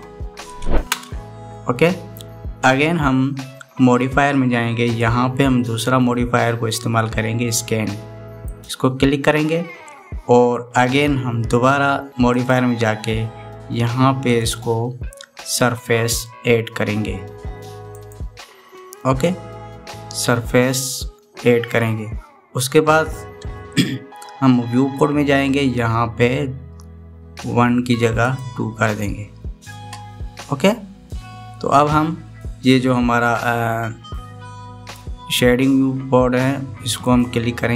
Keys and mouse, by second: 5.8-9.4 drag, 13.2 click, 15.2-18.9 drag, 29.0 click.